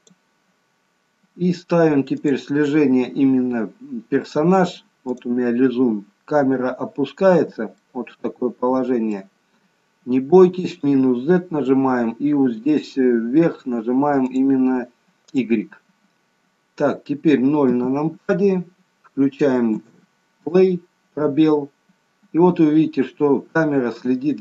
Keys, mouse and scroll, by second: 2.2 click, 7.0 scroll up 2, 7.7 shift+middle click, 10.7 click, 14.2 click, 16.0-17.3 scroll down 2, 17.3-17.7 scroll down 1, 17.7 KP_0, 19.7 space.